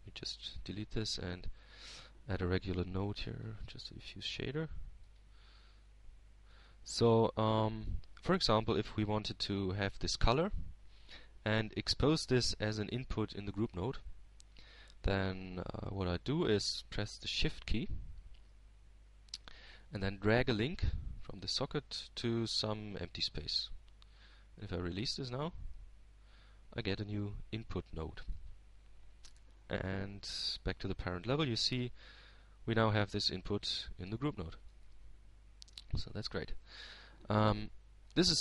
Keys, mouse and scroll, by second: 2.7 click, 3.5 x, 4.5 shift+x, 4.8 shift+a, 6.9-9.1 drag, 9.5-10.7 drag, 10.8-12.0 drag, 23.5-28.8 shift+drag, 30.6-32.4 shift+drag, 34.0 shift+Tab, 37.8-38.4 drag.